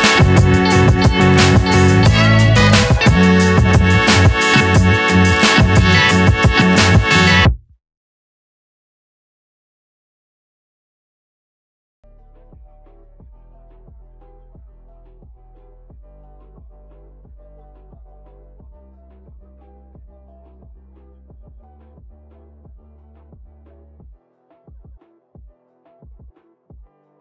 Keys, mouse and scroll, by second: 10.2 click, 13.2 click, 13.2-27.2 drag.